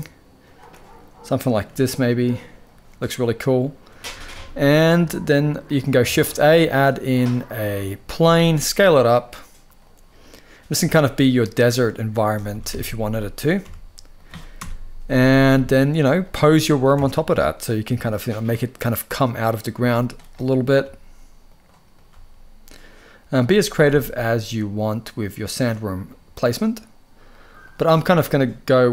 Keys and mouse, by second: 0.1 click, 0.7 drag, 1.4 g, 2.3 click, 4.1 ctrl+s, 4.9-5.4 drag, 5.8 shift+a, 7.9 s, 9.5 click, 10.4 s, 11.3 click, 11.7 middle click, 12.2 s, 12.4 x, 13.3 y, 13.8 click, 14.2 KP_0, 15.4 shift+middle click, 15.9 click, 16.6 ctrl+Tab, 17.0 click, 17.5 g, 19.1 click, 19.4 g, 20.5 g, 21.8 g, 23.4 g, 23.6 g, 27.0-27.4 drag.